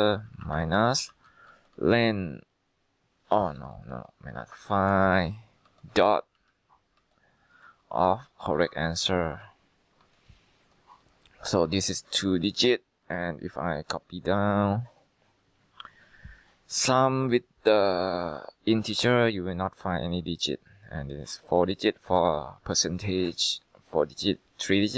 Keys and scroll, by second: 0.0-2.1 typing, 3.5-11.2 typing, 12.2-14.6 typing.